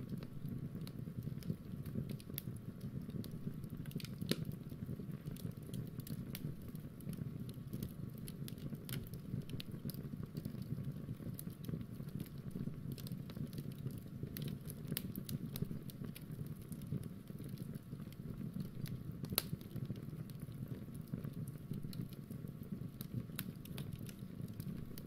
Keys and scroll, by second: 0.1-6.7 super+Tab, 13.0 super+Tab, 14.2 super+Tab.